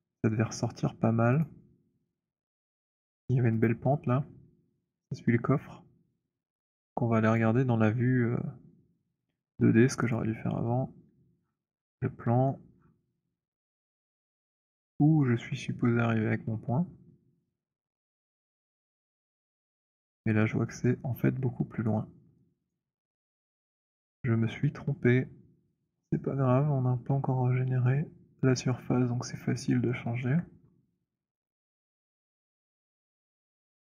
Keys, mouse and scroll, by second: 1.2 click, 3.5 click, 7.2 click, 10.0 click, 11.3-12.3 scroll, 12.3 alt+middle click, 13.0 alt+middle click, 13.7 alt+middle click, 14.2 alt+middle click, 14.8 alt+middle click, 15.5 alt+middle click, 18.0 alt+middle click, 18.6 alt+middle click, 19.7 click, 21.7 right click, 22.8 click, 22.8 right click, 24.0-24.6 scroll, 28.4 click, 28.4-29.5 scroll, 30.1 alt+middle click, 30.7-31.3 scroll, 32.3 right click, 33.6 click.